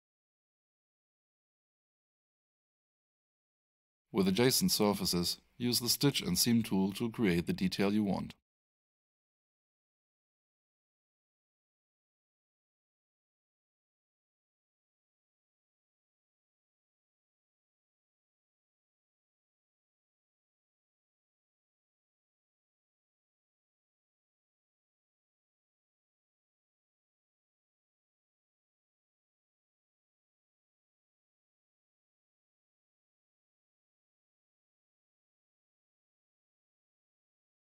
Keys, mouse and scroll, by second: 7.5 click, 11.4 click, 12.8 7, 13.1 Return, 14.7 click, 16.1 4, 16.5 Return, 21.4 click, 23.3 click, 28.7 click.